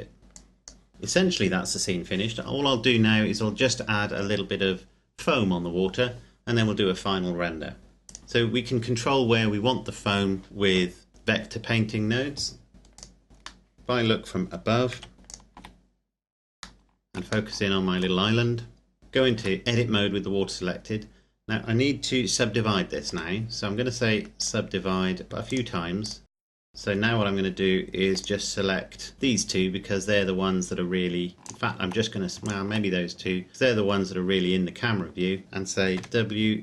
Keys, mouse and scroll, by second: 0.2 scroll up 1, 0.3 click, 7.8 Escape, 8.0 right click, 13.0 click, 13.3-13.6 scroll down 1, 13.6 middle click, 13.7 right click, 14.9 KP_7, 15.2 shift+click, 15.8-16.4 scroll up 1, 16.4-17.1 shift+scroll up 1, 17.5 shift+middle click, 18.1-19.0 scroll up 1, 19.0 Tab, 19.6 Tab, 19.9-20.9 scroll down 1, 20.9-21.6 scroll up 1, 21.6-23.1 scroll down 1, 23.1 w, 24.4 click, 26.7 scroll up 1, 28.1 click, 29.1 shift+right click, 31.3 shift+right click, 32.7 shift+right click, 35.9 w.